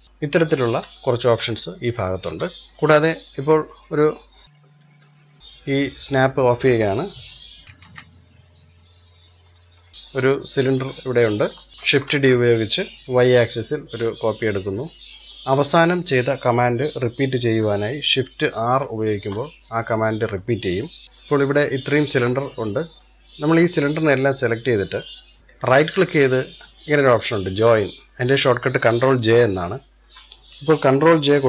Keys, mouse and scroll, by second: 0.0-0.8 scroll down 2, 0.8-1.9 shift+middle drag, 1.9-2.3 scroll down 1, 2.3-2.8 shift+middle drag, 2.8-3.1 scroll up 1, 3.1-4.2 middle drag, 4.2-4.5 scroll down 2, 4.5-4.9 middle drag, 4.9 click, 5.8 click, 7.0 Delete, 7.5 scroll up 2, 7.6 middle click, 7.7 shift+a, 9.7-11.5 shift+middle drag, 11.5 scroll down 2, 11.7 shift+d, 18.4 shift+r, 20.9 shift+r, 21.0 scroll up 2, 21.3-23.2 shift+middle drag, 23.2 drag, 24.5-25.4 middle drag, 25.5-28.6 right drag.